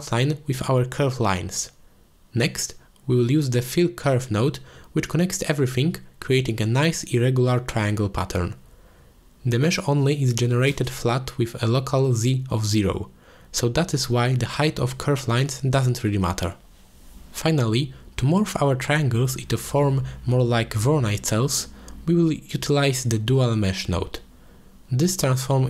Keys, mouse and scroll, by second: 2.2-3.8 drag, 4.4 click, 5.1 shift+a, 6.9 l, 9.4 click, 10.1 z, 10.8 shift+middle drag, 11.3-12.1 middle drag, 13.2-15.2 drag, 15.5 middle click, 17.3 ctrl+s, 17.7-18.1 middle drag, 18.6 click, 19.1 g, 20.5-21.1 drag, 21.5 g, 22.1 drag, 22.6 middle click, 22.8 ctrl+s, 23.2-23.6 drag, 24.3 drag, 24.6 shift+a.